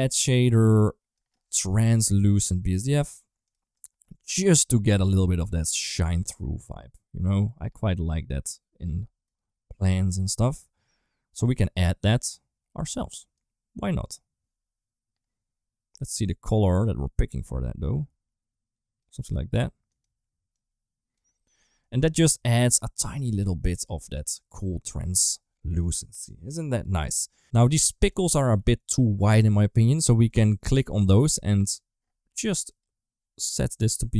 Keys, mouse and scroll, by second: 0.3 middle click, 1.0-3.2 drag, 3.5 click, 21.4 middle click, 22.2 ctrl+s, 22.2 middle click, 23.5 middle click, 28.4 ctrl+s, 31.4 middle click, 32.5 click.